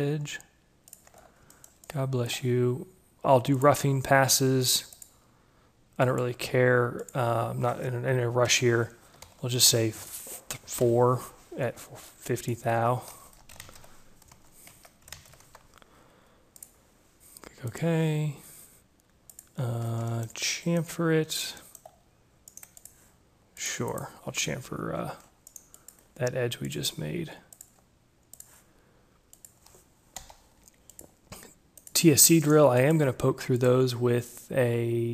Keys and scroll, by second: 8.4 5, 10.0 shift+Left, 11.2 4, 13.5 shift+Tab, 14.0 0, 14.1 5, 15.1 ctrl+a, 15.5 0, 15.7 5, 15.8 Tab, 24.2 Escape, 30.1 Delete.